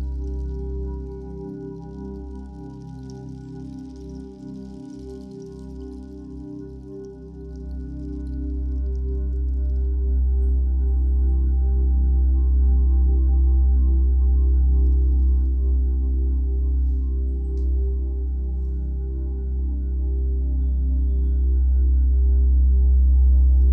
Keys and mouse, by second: 0.1 alt+shift+click, 1.0 Return, 1.4 click, 1.7 t, 2.6 Return, 3.5 click, 6.6 click, 7.7 click, 11.8 right click, 13.4 click, 14.3 ctrl+alt+e, 16.3 click, 18.1 right click, 19.4 click, 22.2 click.